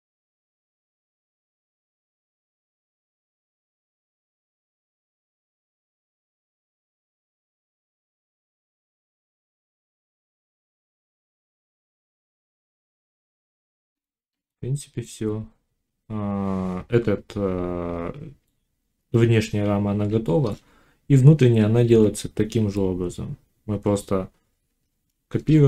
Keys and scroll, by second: 0.1 z, 1.7 z, 5.5 g, 12.0 g, 12.7 x, 13.5 z, 20.6 a.